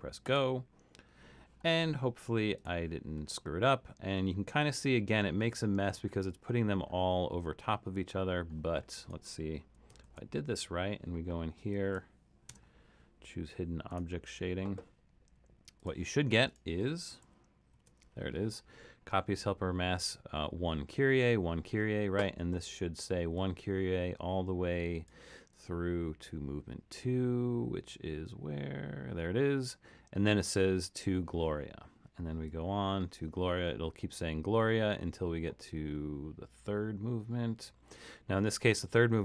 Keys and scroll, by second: 10.1 super+,, 12.6 0, 17.2 super+=, 17.8 super+=.